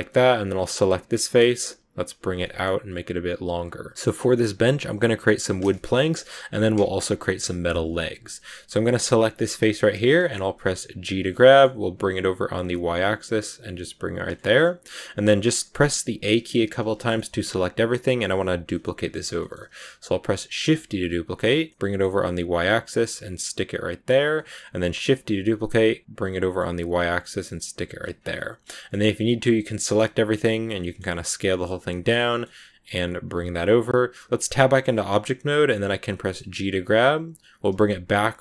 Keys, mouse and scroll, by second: 0.8 right click, 1.0 middle click, 2.0 g, 3.9-7.4 middle drag, 8.7 right click, 9.8-10.9 middle drag, 10.9 g, 14.2 shift+scroll up 1, 14.3 shift+middle click, 15.2 right click, 15.7 a, 16.1 a, 16.8-19.7 shift+middle drag, 18.6 scroll up 1, 19.7-20.6 scroll down 1, 20.6 shift+d, 24.3 middle click, 25.0 shift+d, 28.1 scroll down 2, 28.2 middle click, 29.1 a, 29.3 a, 29.8 middle click, 30.1 s, 30.7 middle click, 31.2 s, 31.9 scroll up 1, 32.0 middle click, 32.7 g, 34.5 Tab, 34.9 scroll down 2, 35.1-36.4 middle drag, 36.4 g.